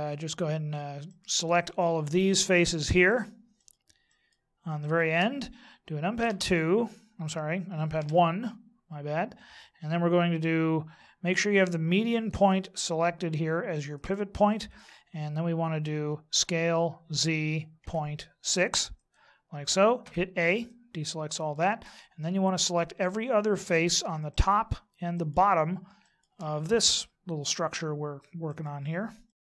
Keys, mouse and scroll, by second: 1.1 shift+right click, 1.7 shift+right click, 2.1 shift+right click, 2.6 shift+right click, 3.1 shift+right click, 3.5 shift+right click, 4.1 shift+right click, 4.8 shift+right click, 6.2 KP_2, 7.9 KP_1, 12.1 click, 14.1 click, 16.3 s, 20.0 a, 20.7 middle click, 22.6 right click, 24.3 shift+right click, 25.1 right click, 26.0 shift+right click, 26.7 middle click, 28.5 shift+right click, 29.3 shift+right click.